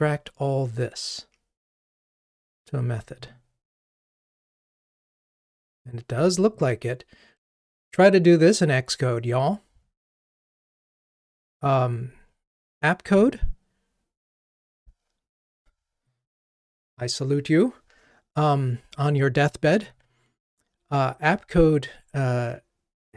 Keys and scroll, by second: 2.9 alt+super+m.